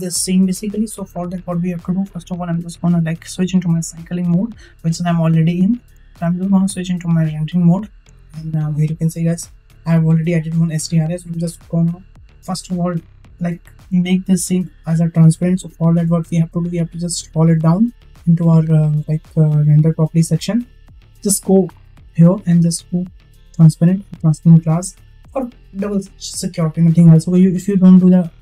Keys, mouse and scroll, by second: 3.3-5.7 drag, 7.7 click, 21.5 click, 23.1 click, 23.9 click.